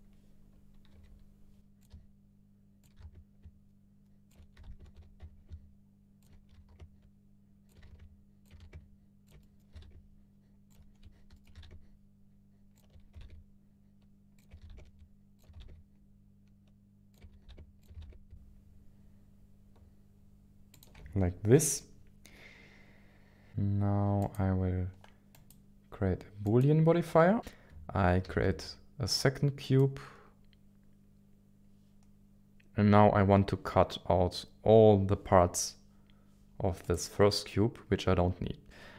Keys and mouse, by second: 0.9 g, 1.8 click, 2.1 s, 2.8 click, 2.9 s, 3.1 y, 4.5 g, 4.7 z, 5.2 g, 5.2 y, 6.2 ctrl+shift+click, 6.4 s, 6.5 y, 6.7 x, 7.6 ctrl+shift+click, 7.8 g, 7.8 x, 8.5 s, 8.7 y, 9.4 middle click, 9.7 s, 9.9 z, 10.6 ctrl+click, 11.0 KP_1, 11.3 shift+middle click, 11.5 s, 11.6 z, 12.7 ctrl+click, 13.1 g, 13.2 z, 14.8 s, 14.8 z, 15.4 ctrl+click, 15.7 g, 17.5 s, 17.5 z, 17.8 ctrl+click, 18.1 z, 18.1 g, 20.7 ctrl+shift+click, 21.8-23.5 middle drag, 24.0-25.3 drag, 27.4 click, 28.2 shift+a, 36.8 click.